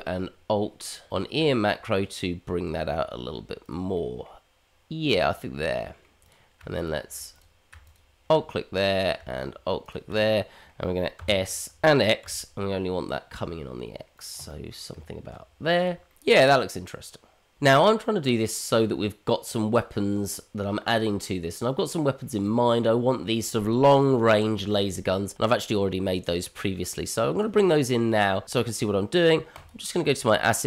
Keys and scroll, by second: 11.1 s, 14.9 Tab.